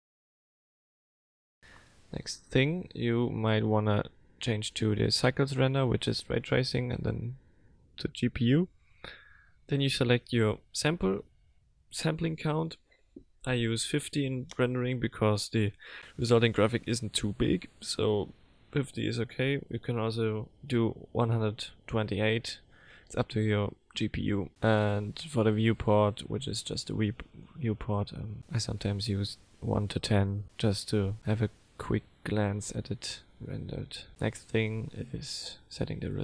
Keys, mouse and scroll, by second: 5.9 click, 6.8 click, 8.9 click, 11.3 click, 13.7 click, 34.8 click, 35.8 click.